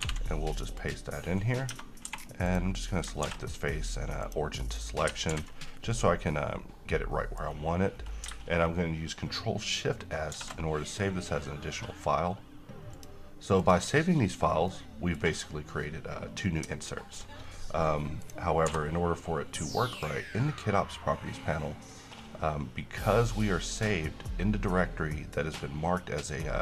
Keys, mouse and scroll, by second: 0.2 ctrl+v, 0.9 click, 1.8 Tab, 2.2 3, 2.6 click, 3.4 s, 4.3 click, 5.5 g, 6.4-7.7 middle click, 7.6-8.3 scroll up 1, 10.5 shift+s, 13.0 click, 14.8-15.4 middle drag, 18.4 click, 18.8 n, 20.1 click.